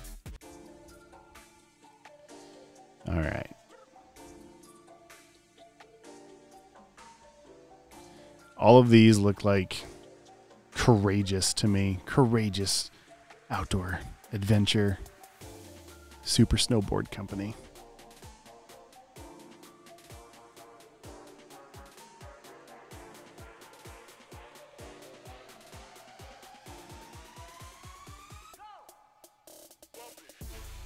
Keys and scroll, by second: 20.8 super+v, 21.5 alt+super+space, 22.3 space, 22.4 space, 26.7 typing.